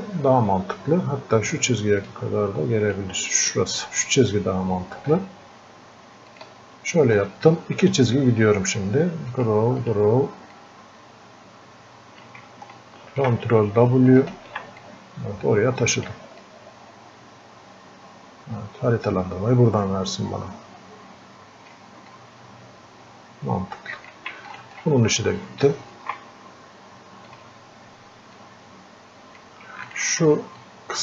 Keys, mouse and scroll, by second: 2.1-5.2 drag, 5.4 ctrl+shift+Num_Lock, 5.4-13.0 drag, 10.9 click, 13.0 ctrl+w, 14.3 ctrl+shift+click, 14.9-16.5 drag, 16.5-22.1 drag, 22.1-29.9 drag, 30.6-31.0 drag.